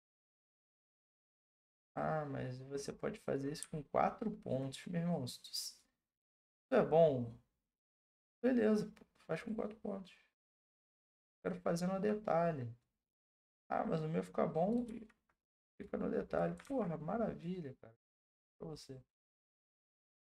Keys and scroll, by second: 0.3 ctrl+z, 14.8 ctrl+z, 16.6 ctrl+z.